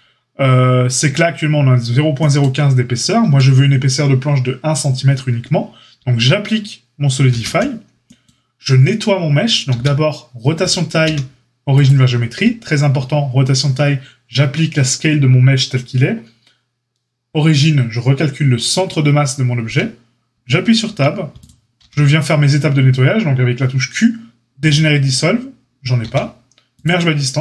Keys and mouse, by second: 3.2 Tab, 7.2 ctrl+a, 10.3 q, 11.0 q, 20.3 Tab, 20.8 a, 21.7 q, 26.0 q.